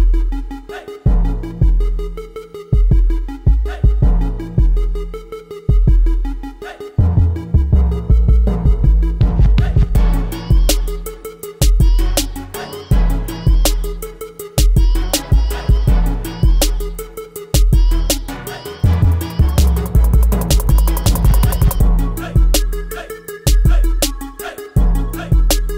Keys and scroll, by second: 0.5 space, 1.2 5, 2.9 7, 3.5 space, 4.0 8, 6.2 ctrl+a, 11.7 ctrl+t, 21.7 t.